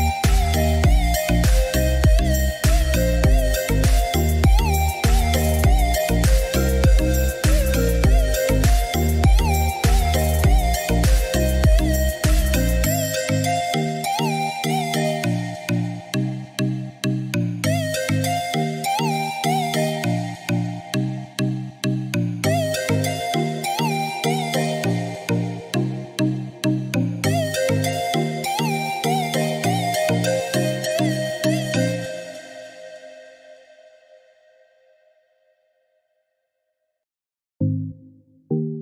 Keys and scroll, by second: 0.8 Escape, 5.4-7.0 typing, 7.1 Return, 28.1 Escape, 37.6-38.8 typing.